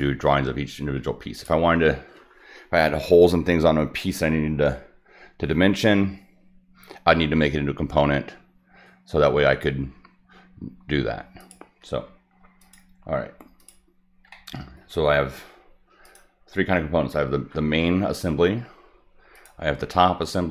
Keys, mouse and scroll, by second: 1.3 click, 11.4 click, 12.6 click, 13.6 click, 14.3-14.8 middle drag, 16.0 click, 19.3 click.